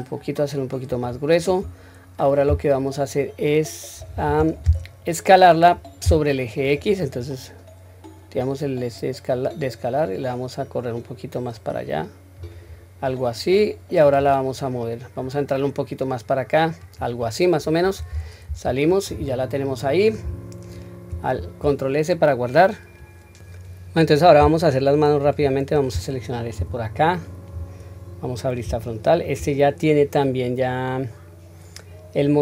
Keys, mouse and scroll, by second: 6.6 click, 8.4 click, 8.9-12.4 drag, 14.1 click, 15.2 click, 15.5-17.0 drag, 18.1 Tab, 18.7-19.1 scroll down 1, 19.1-20.1 middle drag, 21.1 ctrl+s, 23.3 click, 25.2 click, 26.6 KP_1, 27.6-28.0 scroll up 1, 28.2-28.6 scroll up 1, 28.8-29.2 shift+middle drag, 30.0-30.3 scroll down 1, 30.7-32.4 middle drag.